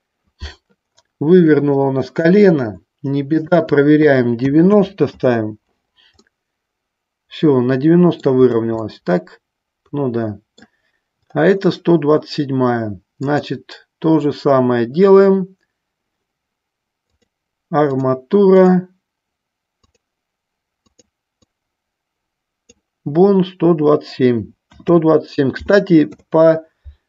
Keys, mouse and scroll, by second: 3.7-5.8 drag, 6.4-8.5 middle drag, 9.0-10.8 middle drag, 13.4-15.8 drag, 17.3 click, 18.9-20.1 drag, 21.1-27.0 drag.